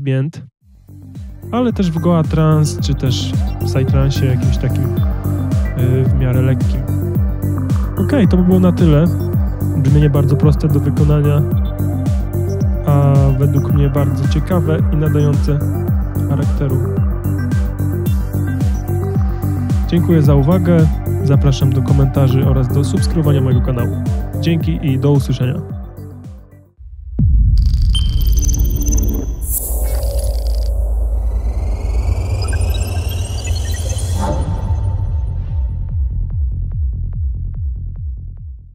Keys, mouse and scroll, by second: 3.5 click.